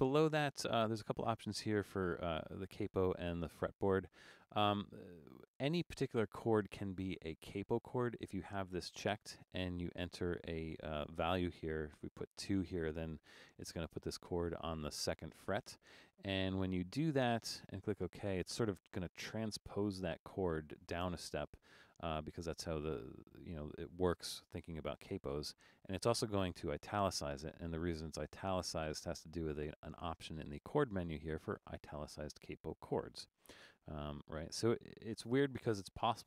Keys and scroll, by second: 12.8 2.